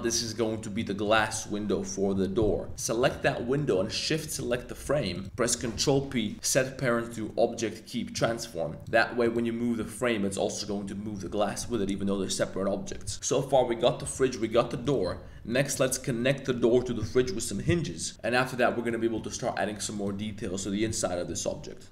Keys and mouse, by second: 0.2-0.6 middle drag, 0.8 middle drag, 2.7 g, 3.0 g, 4.3 shift+click, 4.8 g, 5.1 click, 5.7 super+p, 9.2 click, 9.8 g, 13.1 g, 14.0 g, 15.5 middle drag, 18.1 g, 18.6 middle drag, 19.1 g, 19.9-21.9 drag.